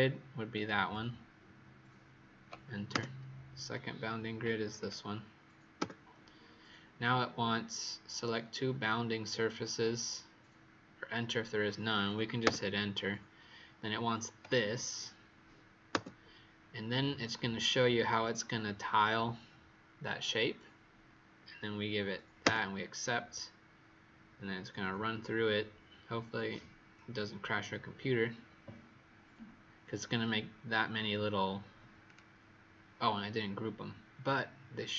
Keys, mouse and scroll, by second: 2.8 Return, 4.7 click, 5.7 Return, 14.3 click, 15.9 Return, 32.0 click.